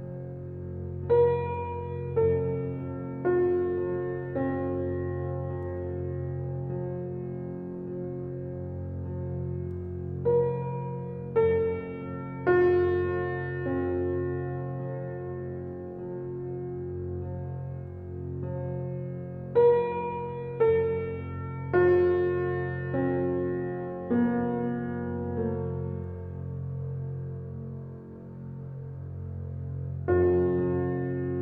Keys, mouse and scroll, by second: 1.5-2.4 scroll up 1, 2.4 scroll down 1, 3.9-5.0 typing, 6.9-8.8 typing, 10.0 click, 11.0-11.4 scroll up 1, 12.3 click, 13.2-13.8 scroll down 1, 13.8 click, 14.1 scroll down 1, 14.7 scroll up 1, 15.1-15.8 scroll down 1, 15.8-16.3 scroll up 1, 18.2 scroll down 1, 18.3-18.7 scroll up 1, 27.3 scroll down 1, 30.5 click, 30.9 scroll up 1.